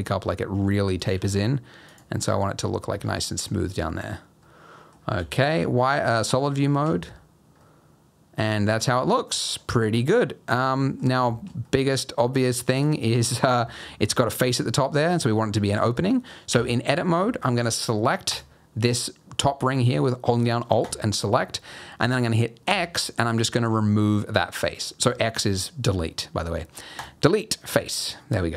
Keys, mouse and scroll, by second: 1.0 s, 1.1 g, 2.6 scroll down 3, 2.9 Tab, 3.7-4.1 scroll down 3, 4.4 middle click, 5.1 z, 7.6 middle click, 9.5 scroll down 2, 9.7 middle click, 9.9-10.6 scroll up 1, 10.8 middle click, 11.0 scroll up 1, 11.3 shift+middle click, 11.6 middle click, 12.5 middle click, 12.8 scroll up 1, 13.2 middle click, 13.6 shift+middle click, 14.0 middle click, 15.5 middle click, 16.5 Tab, 18.3 alt+click, 20.8 alt+click, 22.6 x, 27.6 middle click.